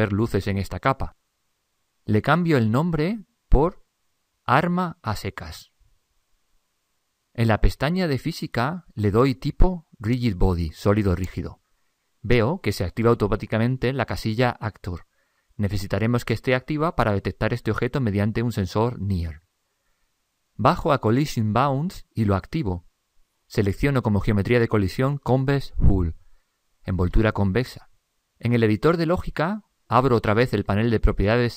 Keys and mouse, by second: 0.5 click, 4.0 BackSpace, 4.2 BackSpace, 9.3-11.7 drag.